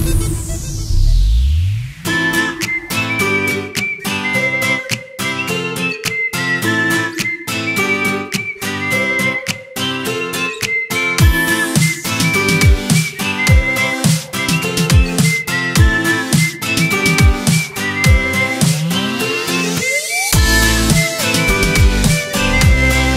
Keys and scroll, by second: 1.0 v, 1.3 ctrl+c, 1.4 ctrl+f, 4.3 z, 4.6 space, 5.5 v, 8.6 z, 8.8 space, 9.2 v, 9.9 Delete, 10.7 t, 11.1 v, 12.6 v, 12.8 Delete, 13.4 ctrl+a, 14.2 shift+., 14.2 BackSpace, 15.2 ctrl+Return, 17.7 ctrl+shift+o, 18.1 z, 18.4 space, 18.7 v, 19.8 ctrl+a, 20.2 ., 20.7 ctrl+Return, 21.0 ctrl+shift+o.